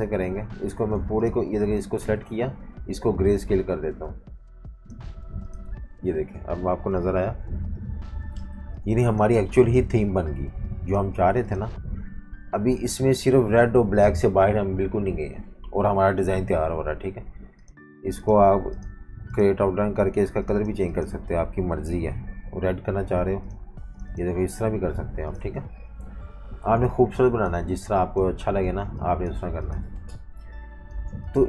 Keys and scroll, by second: 1.0 v, 2.2 super+z, 7.1 super+-, 7.2 super+-, 8.5-11.1 typing, 22.1 i, 23.7 v, 25.6 super+-, 25.8 super+-, 26.6-28.8 typing, 30.1 super+-, 30.9-31.4 typing.